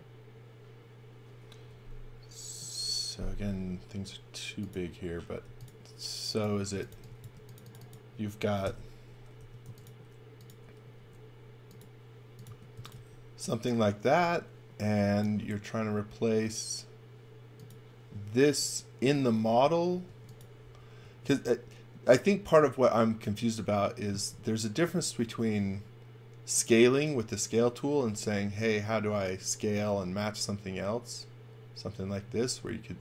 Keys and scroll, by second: 5.4 b, 6.5-7.4 typing, 8.6 g, 9.4 m, 11.0 s, 12.5-13.4 typing, 15.4 space, 19.4 x, 20.1 space, 21.0 x, 21.3 v, 24.3 space, 25.2 s, 32.2 space.